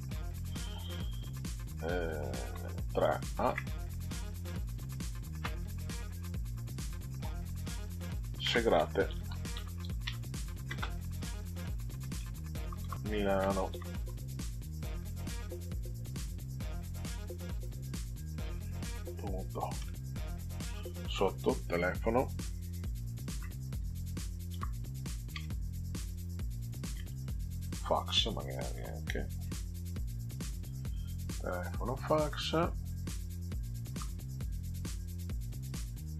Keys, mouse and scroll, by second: 2.5 3, 3.4 shift+a, 5.3 space, 8.5-10.9 typing, 12.1-14.5 typing, 15.8 click, 16.8 Delete, 17.6 click, 19.8 ., 21.2 Return, 23.3 shift+t, 23.8 e, 24.5 ò, 25.3 space, 27.7-29.9 typing, 31.3 click, 33.9 Delete, 34.6 click, 36.0 click.